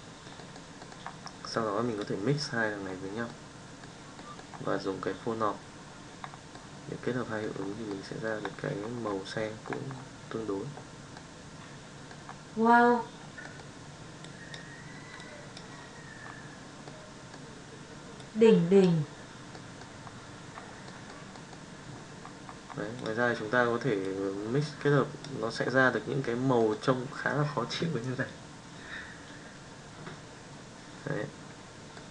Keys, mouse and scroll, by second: 0.5 middle drag, 1.7-2.2 drag, 3.2-3.8 middle drag, 4.3 middle drag, 6.5-7.4 middle drag, 7.8-8.3 middle drag, 16.9 middle click, 18.1 click, 19.5 middle drag, 20.9 middle click, 22.9 click, 26.6 middle drag, 31.9-32.1 middle drag.